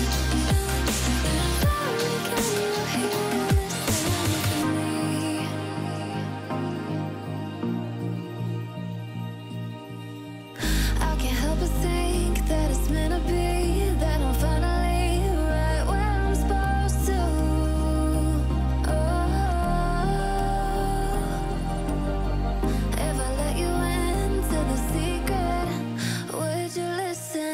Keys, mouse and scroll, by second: 0.6 click, 0.7 click, 1.6 alt+scroll up 1, 2.5 click, 2.6 alt+scroll up 1, 2.7-5.5 drag, 8.1 alt+scroll down 1, 10.4-11.5 alt+scroll down 1, 12.4 click, 17.5 alt+Num_Lock, 17.5 click, 17.5-18.2 alt+scroll up 2, 18.2-18.9 drag, 18.9-20.2 alt+scroll down 2, 20.7-23.8 alt+drag, 24.9-26.3 alt+scroll up 2.